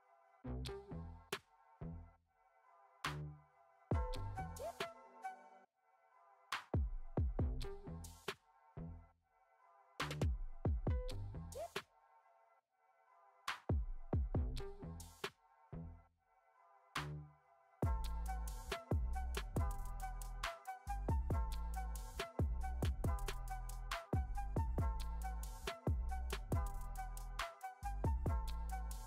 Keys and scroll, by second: 11.3 space, 21.8 space.